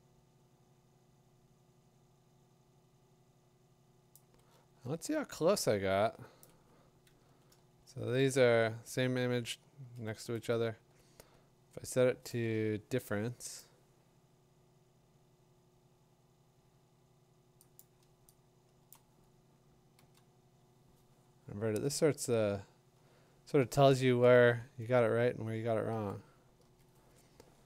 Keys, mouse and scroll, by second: 4.1 click, 4.5 middle click, 4.8 scroll, 5.6 middle click, 6.4 click, 8.2 v, 8.3 t, 8.7 scroll, 9.4-9.9 scroll, 10.6 middle click, 13.6 click, 17.8 click, 18.1-18.8 click, 18.6 click, 18.9 click, 20.0 ctrl+i, 21.6-22.3 alt+scroll, 21.9 middle click, 22.7 middle click, 22.8 middle click, 22.8 middle click, 23.3 middle click, 25.9 ctrl+i, 26.7 ctrl+i, 27.5 middle click, 27.6 middle click.